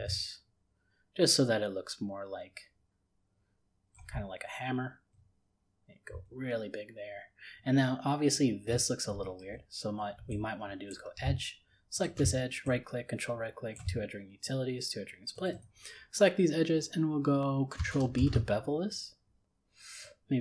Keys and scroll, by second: 18.1 ctrl+b.